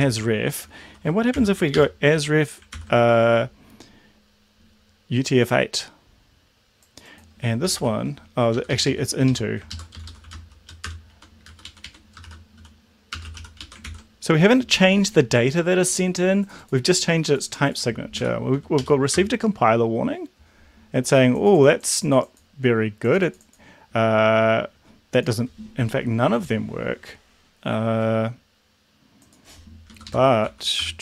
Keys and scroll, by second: 0.0 ctrl+z, 1.4 u, 1.7 8, 2.1 Right, 2.7 ctrl+s, 7.4-8.3 typing, 8.5 Up, 8.7 Left, 8.9 Left, 9.1 Left, 9.3 Left, 10.0 shift+a, 10.2 s, 10.9 shift+Return, 11.1 Right, 11.4 Down, 11.6 Right, 11.8 Right, 12.3-13.8 typing, 18.3 Down, 18.7 Up, 19.1 Return, 29.9 Left, 30.1 Left, 30.4 a, 30.8 BackSpace.